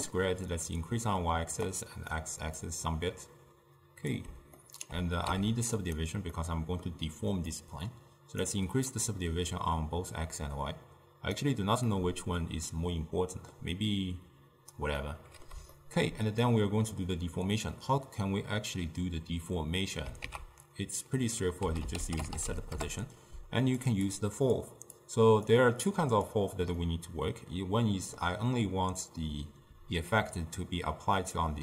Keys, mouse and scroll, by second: 0.6-2.5 drag, 2.7-4.6 drag, 4.6-5.3 ctrl+middle drag, 5.3 z, 6.4-7.6 middle drag, 7.6-12.0 drag, 12.0-15.0 middle drag, 15.1-16.5 middle drag, 16.5-19.5 drag, 20.3 ctrl+a, 24.1-25.1 drag, 26.0 click, 26.8-29.8 middle drag, 29.8 d, 30.2-31.4 drag, 31.4-31.6 d.